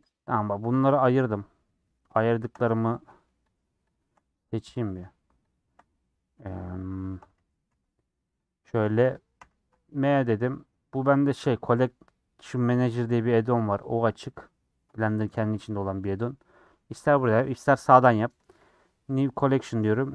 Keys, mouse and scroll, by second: 0.0 ctrl+a, 0.2 middle click, 0.9 click, 1.2 scroll up 4, 1.7 click, 2.3 shift+click, 2.6 middle click, 3.5 shift+click, 3.9 shift+click, 4.2-5.5 middle drag, 5.5 shift+click, 5.7-6.8 middle drag, 7.6 g, 8.6 middle click, 9.3 m.